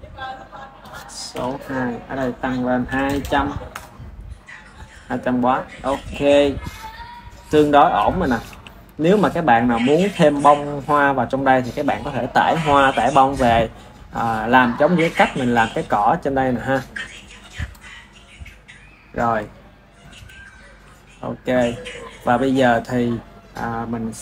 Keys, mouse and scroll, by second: 0.5-1.5 drag, 2.1 click, 3.1 KP_0, 5.0 click, 10.1 ctrl+s, 12.0 ctrl+s, 17.3 KP_1, 17.5 KP_1, 18.4-19.5 ctrl+middle drag, 19.5 click, 22.2 ctrl+s.